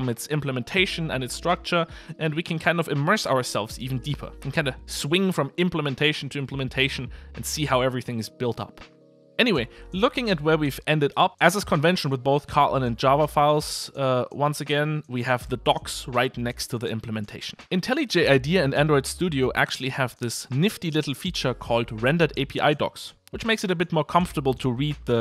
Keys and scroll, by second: 10.7 super+b.